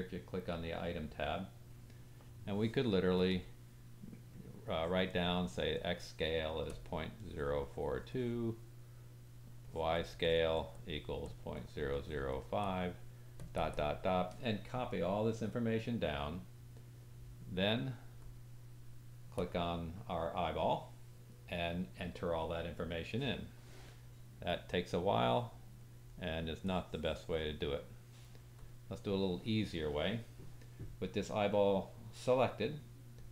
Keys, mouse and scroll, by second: 0.5 click, 0.6-3.3 middle drag, 3.3-19.4 drag, 19.4-24.5 middle drag, 24.5-33.3 drag.